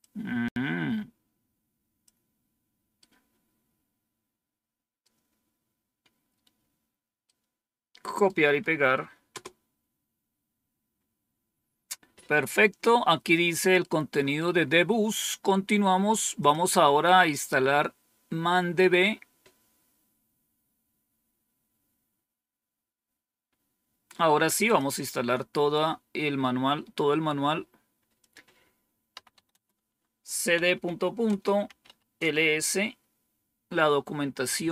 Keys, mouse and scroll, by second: 2.9-4.9 right drag, 7.2 right click, 9.2 Return, 11.8-12.6 scroll down 2, 12.6-14.0 scroll down 1, 14.1 scroll up 1, 16.3 click, 24.5 click, 28.1 click, 28.8-32.3 typing.